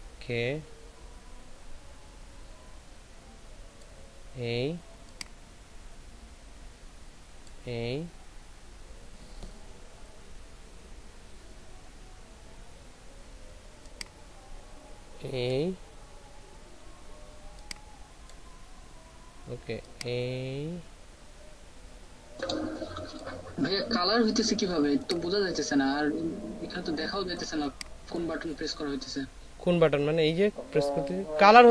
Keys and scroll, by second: 24.6 ctrl+space.